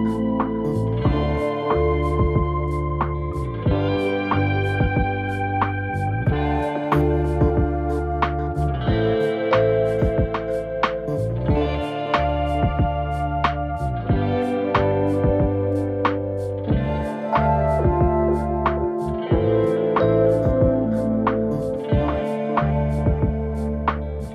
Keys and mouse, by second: 1.0 shift+h, 1.5 middle drag, 2.1 right click, 2.6 KP_1, 3.1 g, 3.7 shift+middle click, 5.0 click, 5.7 click, 5.9 right click, 6.5 click, 6.7-7.0 right drag, 7.0 z, 7.3 g, 8.3 shift+middle click, 8.8 shift+middle click, 9.5 g, 10.7 shift+middle click, 11.0-12.9 typing, 11.6 right click, 11.7 Tab, 12.2 click, 14.1 shift+middle click, 14.4 shift+middle click, 15.0 click, 15.5 click, 15.9 g, 17.2 click, 17.7 g, 19.5 KP_3, 19.7 Tab, 20.2 g, 21.6 shift+middle click, 22.0 shift+middle click, 22.8 shift+g, 24.2 Tab.